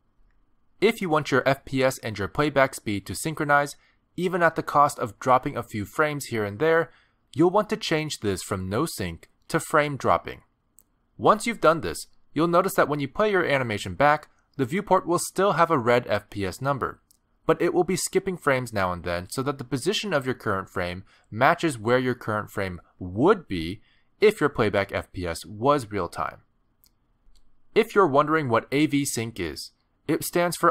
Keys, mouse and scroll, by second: 20.6 click, 23.2 click.